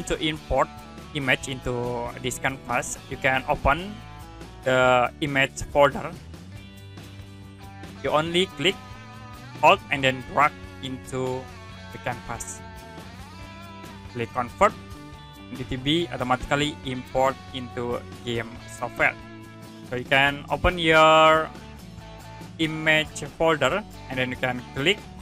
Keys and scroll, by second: 6.3 alt+Tab, 6.8 alt+Tab, 20.8 alt+Tab.